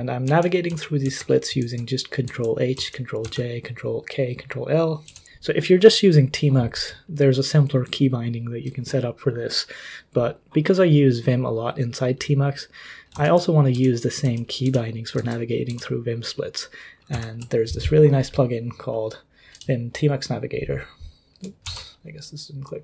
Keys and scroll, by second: 0.2 ctrl+j, 0.7 ctrl+k, 1.0 ctrl+h, 1.6 ctrl+l, 2.2 ctrl+j, 2.7 ctrl+k, 3.2 ctrl+h, 5.1 ctrl+d, 5.2 ctrl+u, 5.2 k, 13.2 ctrl+l, 13.2 typing, 13.7 ctrl+j, 14.2 ctrl+k, 14.6 ctrl+h, 15.2 ctrl+l, 15.7 ctrl+j, 17.1 ctrl+h, 21.6 ctrl+w.